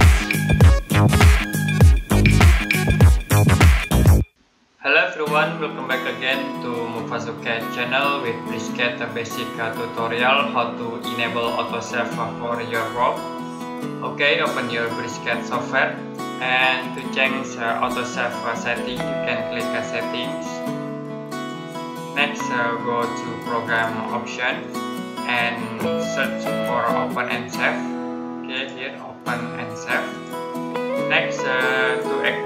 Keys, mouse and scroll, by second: 4.2 click, 20.3 click, 28.4 click.